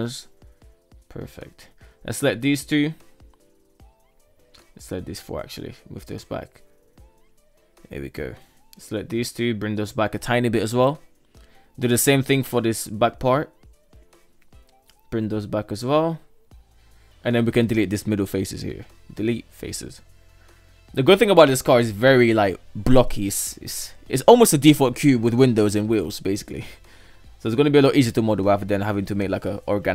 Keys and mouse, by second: 0.7 KP_1, 0.9 right click, 1.2 shift+right click, 2.2-2.8 right drag, 3.3 shift+right click, 3.7 shift+right click, 4.0 shift+right click, 4.8 g, 7.5 right click, 7.8 shift+right click, 8.4 g, 10.3 shift+middle click, 10.8 right click, 11.1 shift+right click, 11.7 g, 13.4 right click, 13.8 shift+right click, 14.5 g, 16.9 KP_3, 17.1 right click, 17.5 shift+right click, 18.2 Delete, 24.0 KP_1, 25.0 right click, 25.4 g, 28.1 shift+middle click, 28.7 shift+middle click, 29.4 Tab, 29.8 alt+z.